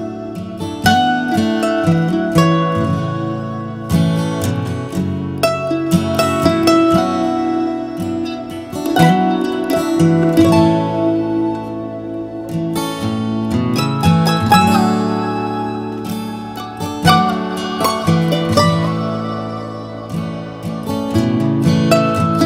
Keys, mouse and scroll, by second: 2.0-3.3 drag, 4.6-8.4 drag, 10.4 click, 12.8 Delete, 12.8 BackSpace, 16.3 ctrl+z, 17.8 ctrl+z.